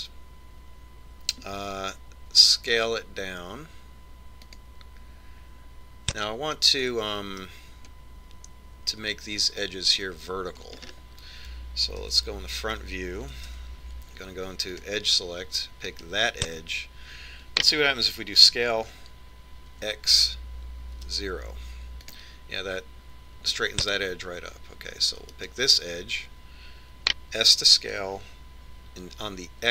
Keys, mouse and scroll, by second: 3.8 s, 8.1-10.1 middle drag, 12.4-14.4 middle drag, 13.6 KP_1, 15.1 ctrl+Tab, 17.5 right click, 20.0 s, 27.0 right click, 29.1 s.